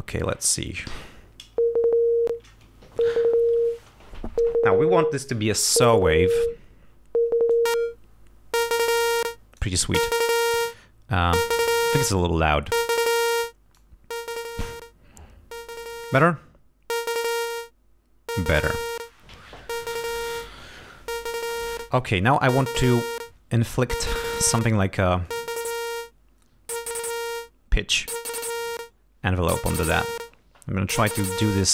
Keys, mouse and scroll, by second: 0.9 l, 7.5-9.8 drag, 12.7 click, 13.8-18.6 drag, 21.4 click, 25.3-29.0 drag.